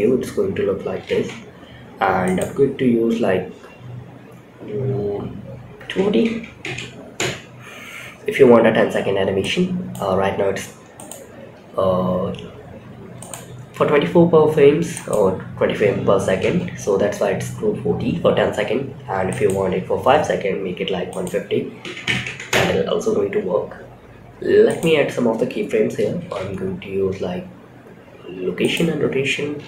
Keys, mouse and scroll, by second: 0.4 shift+Left, 1.5-6.5 drag, 8.7 click, 10.3 click, 12.5 click, 12.8-13.3 scroll down 3, 13.3-14.2 scroll up 1, 14.2-18.8 drag, 19.3-20.4 scroll up 2, 20.4-21.9 drag, 24.0 click, 25.5 i, 29.1 shift+Right.